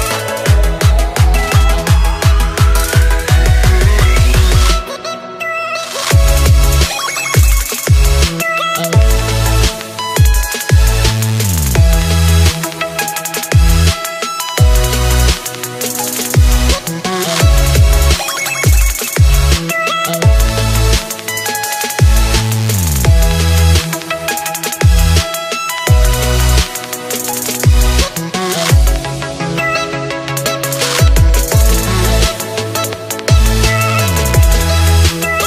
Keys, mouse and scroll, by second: 1.3 KP_7, 2.4 s, 4.1 click, 4.5 scroll down 2, 4.8-7.3 middle drag, 7.3 click, 8.5 KP_3, 9.1 KP_1, 9.8-10.5 scroll up 1, 10.5 s, 12.5 click, 13.1 scroll down 1, 13.3-15.5 middle drag, 15.5 click, 16.5 KP_7, 17.1-18.5 scroll down 7, 18.5-22.1 drag, 22.6 shift+middle click, 23.2-24.1 shift+scroll up 2, 24.1-25.9 drag, 25.9-26.4 scroll up 4, 26.4-27.5 shift+middle drag, 27.5-31.1 drag, 34.9-35.4 drag.